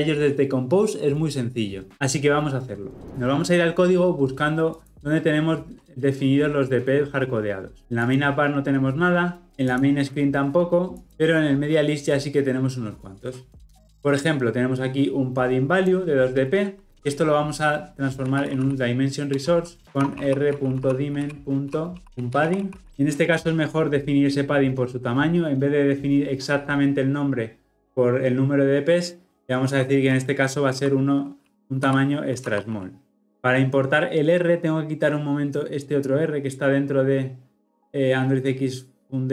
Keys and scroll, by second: 19.5 Return.